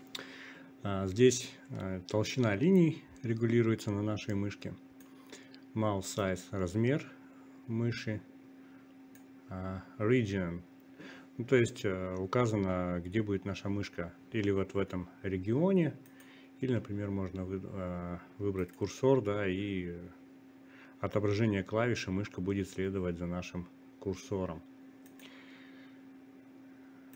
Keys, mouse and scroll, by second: 8.3-10.6 drag, 8.4-9.5 right drag, 11.7-14.7 drag, 21.6-24.2 drag.